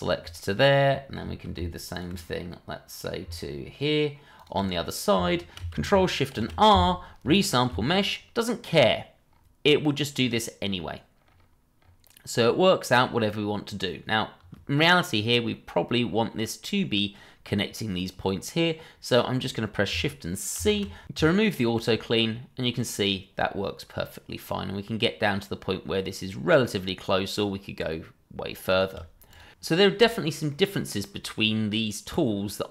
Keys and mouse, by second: 0.3-0.7 middle drag, 0.9 middle drag, 1.9 shift+click, 2.5-3.0 middle drag, 4.3 ctrl+click, 4.7-5.1 middle drag, 5.3 shift+middle drag, 6.3 ctrl+shift+r, 15.5-16.6 middle drag, 20.5 shift+c, 28.7 shift+click, 29.3 click, 29.9 space, 30.2-30.7 middle drag, 30.8 middle click, 31.6-32.7 middle drag.